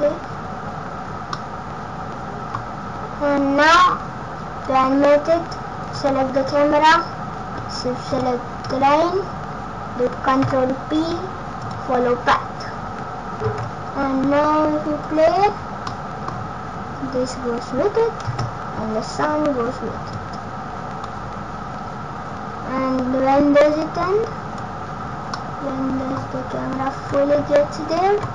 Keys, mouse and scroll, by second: 0.3 scroll down 1, 1.3 middle click, 5.0-5.8 scroll up 1, 6.3 click, 8.0 shift+click, 10.3 ctrl+p, 13.4 space, 15.8 middle click, 16.3-16.8 scroll down 5, 18.3 space, 20.0 click, 23.5 click, 25.0 scroll up 3, 25.3 middle click, 26.3 scroll up 1, 27.5-28.3 Left.